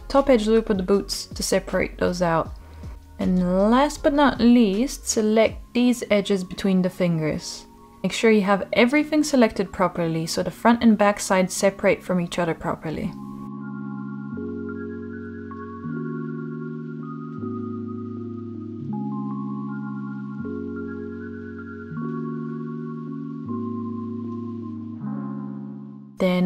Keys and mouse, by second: 0.0 shift+click, 2.1 shift+click, 2.5 shift+click, 5.2-5.6 shift+middle drag, 8.5-9.3 middle drag, 9.5-9.9 shift+middle drag, 10.8 shift+middle click, 12.6 shift+click, 13.7-14.7 middle drag, 15.0-15.3 shift+middle drag, 16.1-16.8 shift+middle drag, 17.0-17.6 middle drag, 17.8 shift+middle click, 21.0 shift+click, 22.1-23.8 middle drag, 24.4 shift+middle drag, 25.0-26.4 middle drag.